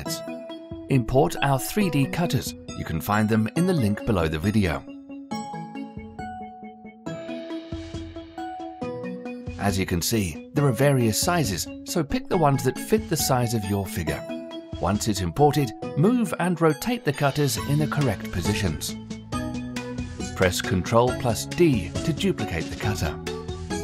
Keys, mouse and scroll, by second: 7.1 click, 7.3 g, 8.3 click, 8.8 g, 10.1 click, 10.6 g, 11.8 click, 12.1 g, 13.0-13.4 scroll down 1, 13.4-14.9 middle drag, 14.9 KP_1, 16.4 click, 16.9-17.7 scroll up 3, 17.7-19.9 shift+middle drag, 19.9 shift+d, 21.7-22.6 middle drag, 22.6 g.